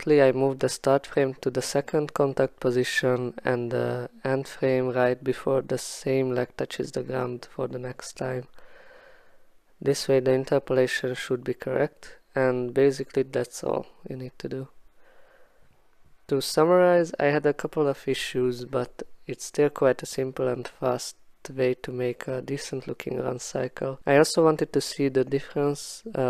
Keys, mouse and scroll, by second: 0.8 click, 0.8-1.7 typing, 2.7 Return, 3.6 click, 4.4 click, 7.0 click, 7.6 click, 7.8 click, 8.1-8.5 typing, 9.1 click, 9.5 click, 9.9 click, 10.4 click, 10.8 click, 11.1 x, 15.3 x, 21.6-22.3 typing, 21.8 click.